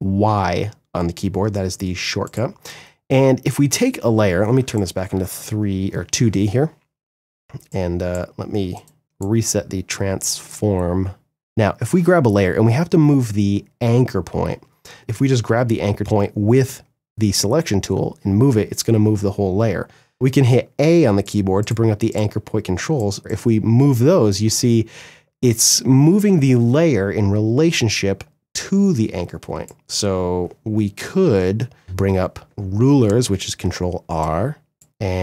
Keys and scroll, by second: 18.7 ctrl+z, 19.8 a, 23.2 ctrl+z, 32.8 ctrl+r.